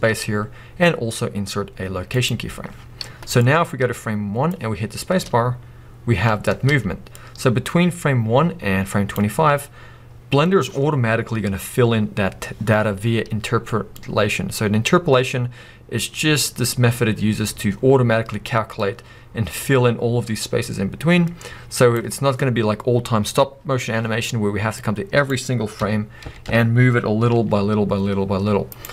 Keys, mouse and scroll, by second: 3.4-28.8 drag, 6.6 space, 25.8 Left, 27.3 g, 28.8 right click.